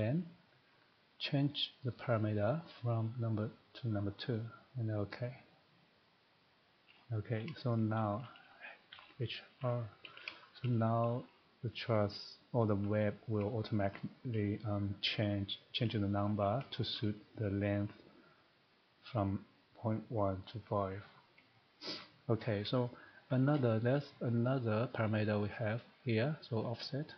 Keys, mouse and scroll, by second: 2.1 click, 4.2 click, 5.0 click, 6.9-7.2 scroll, 7.6 shift+middle click, 8.3 shift+middle click, 8.4-8.7 scroll, 8.9-9.6 typing, 10.2 scroll, 11.7 scroll, 12.7 shift+middle click, 13.1 shift+scroll, 13.1 typing, 13.4 middle click, 13.9 shift+middle click, 16.9 shift+middle click, 22.0 shift+middle click, 22.5 scroll, 23.3 shift+middle click, 24.4 click, 26.8 click.